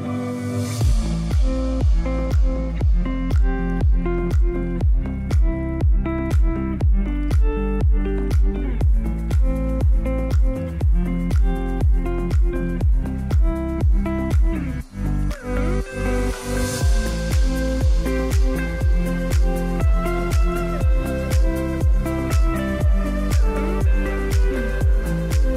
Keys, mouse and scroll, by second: 1.3 scroll down 1, 3.0 click, 9.7-14.5 drag.